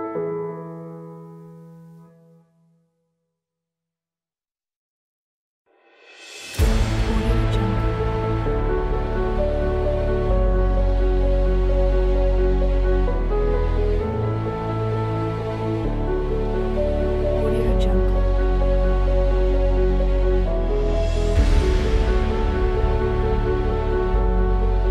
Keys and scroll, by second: 5.3 space, 12.8 space, 16.0 space, 18.6 space, 20.8 space, 24.1 space.